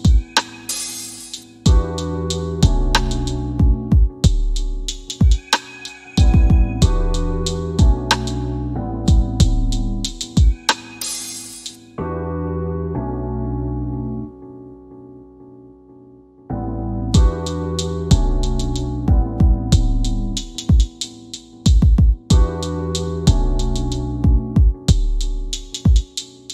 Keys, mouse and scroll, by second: 0.4 middle click, 1.1 scroll down 1, 1.9 scroll up 1, 2.5 middle click, 4.2 scroll down 1, 4.7 scroll up 1, 4.9 scroll down 1, 6.3 click, 6.3 typing, 11.1 scroll up 1, 11.2-11.5 typing, 11.5 middle click, 13.3 scroll down 1, 13.3 typing, 14.5 click, 20.4 typing, 21.3 scroll up 1, 22.2 scroll down 1, 22.9 middle click, 23.6 scroll up 1, 25.5 scroll down 1, 26.3 middle click.